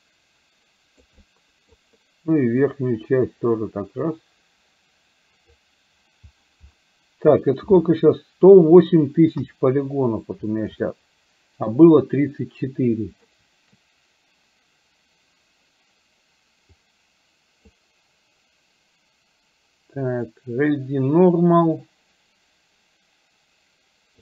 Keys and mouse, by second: 1.3 middle click, 2.7-5.5 drag, 9.4 KP_1, 10.9 shift+middle click, 17.0 click.